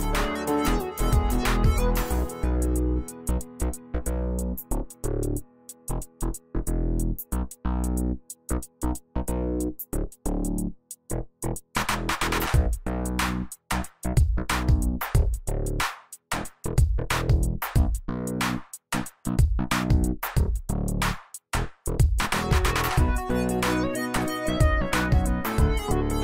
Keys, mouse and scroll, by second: 11.5 click, 18.2 alt+shift+click, 19.0-20.3 drag.